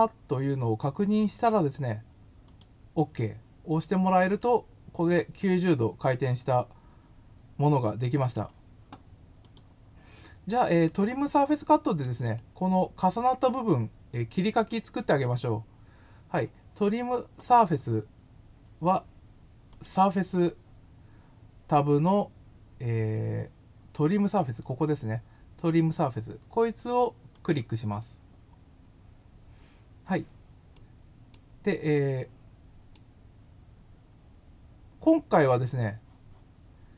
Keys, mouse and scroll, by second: 2.4 click, 4.3-6.9 middle drag, 9.4 click, 10.8-11.9 middle drag, 12.3-14.3 middle drag, 19.6 click, 27.3 click, 30.7-31.2 middle drag, 31.9 middle click.